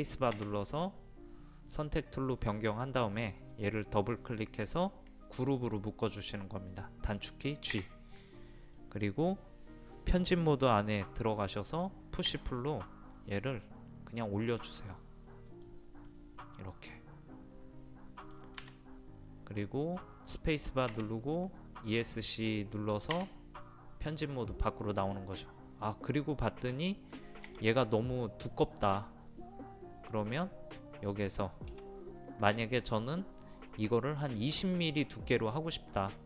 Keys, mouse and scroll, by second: 1.1 space, 3.4 click, 7.7 click, 8.7-10.1 drag, 12.3 p, 13.2 click, 16.1-18.6 middle drag, 18.6 Escape, 20.0-21.1 middle drag, 23.1 Escape, 24.5-27.1 middle drag, 27.1-27.5 scroll up 1, 30.8-32.1 middle drag.